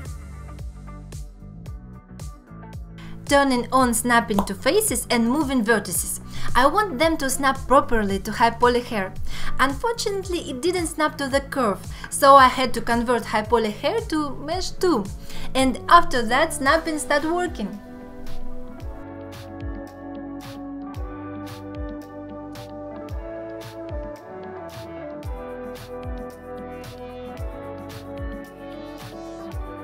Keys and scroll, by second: 0.4 ctrl+z, 1.6 shift+x, 5.0 g, 5.5 alt+z, 6.1 alt+z, 6.4 g, 7.7 g, 8.3 alt+z, 8.5 alt+z, 9.6 ctrl+Tab, 10.3 alt+z, 10.7 1, 12.9 alt+z, 13.5 g, 14.0 g, 14.9 g, 15.5 ctrl+Tab, 18.8 `, 19.5 Tab, 19.7 alt+z, 20.1 alt+z, 20.4 g, 21.0 g, 21.5 alt+q, 22.1 alt+q, 22.6 g, 23.4 g, 24.2 alt+z, 24.5 alt+z, 25.0 g, 25.6 alt+q, 26.2 alt+q, 26.9 alt+q, 27.4 alt+q, 27.8 g, 28.6 alt+q, 29.0 alt+q, 29.6 alt+q.